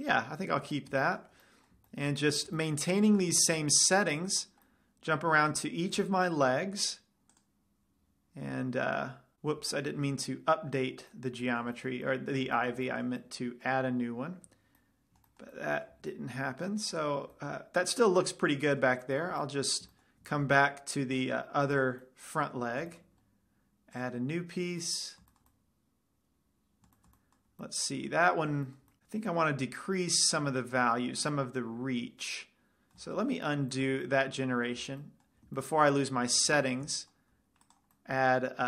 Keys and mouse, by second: 0.8-1.7 middle drag, 2.9 z, 5.2-6.7 middle drag, 15.3-16.3 middle drag, 16.3 z, 16.6-17.2 middle drag, 17.8 middle click, 19.2 middle click, 19.4-21.0 middle drag, 22.1-23.0 drag, 22.4-23.6 middle drag, 23.1 click, 23.6 right click, 23.8-25.6 middle drag, 24.3-25.8 drag, 24.3-24.9 right drag, 25.8-26.8 middle drag, 33.7 ctrl+z, 35.1 z, 36.7 z, 37.0-38.6 middle drag.